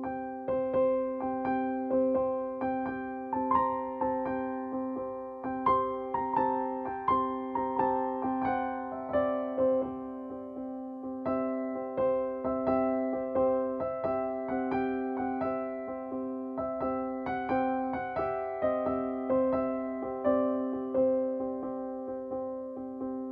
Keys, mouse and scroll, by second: 1.8-5.3 drag, 1.8 typing, 5.9-10.1 drag, 5.9 typing, 7.4 typing, 13.5-16.1 drag, 16.1-17.4 drag, 17.4 Up, 19.6 ctrl+space, 19.8 ctrl+click, 20.0 ctrl+space, 20.9-23.3 drag.